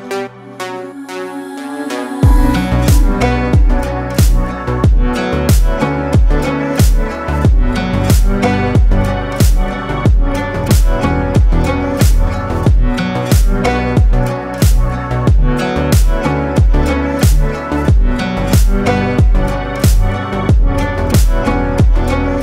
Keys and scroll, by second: 3.2 ctrl+space, 11.7 Escape, 15.3 Escape, 19.1 Escape.